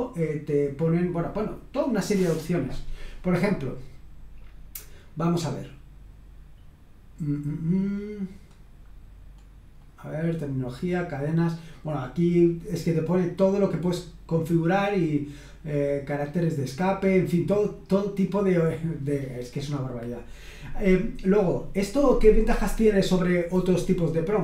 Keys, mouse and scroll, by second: 4.8-5.7 scroll down 1, 5.7-6.9 scroll down 1, 8.1-10.7 scroll down 7, 12.7-14.3 scroll down 3, 14.7-16.8 scroll down 2, 16.8-17.9 scroll down 1, 17.9-19.0 scroll down 1.